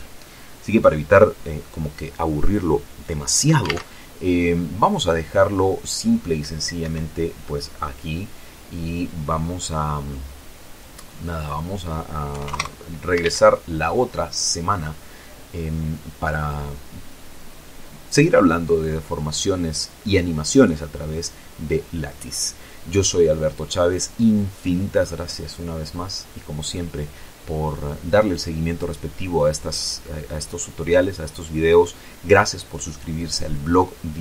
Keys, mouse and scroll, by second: 4.1 alt+a, 7.2 Escape, 11.8 click, 12.7 KP_6, 12.8 KP_0, 12.9 KP_Enter, 13.6 alt+a.